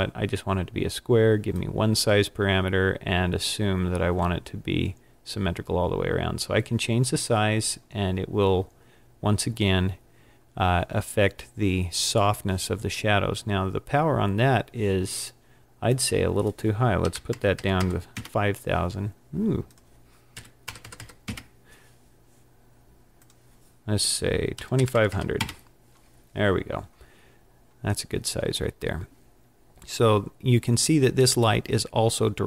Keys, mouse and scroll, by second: 13.2-14.6 scroll down 12, 15.9 click, 17.6 KP_0, 19.7 click, 20.9 KP_0, 21.0 KP_0, 23.2 click, 25.1 KP_0.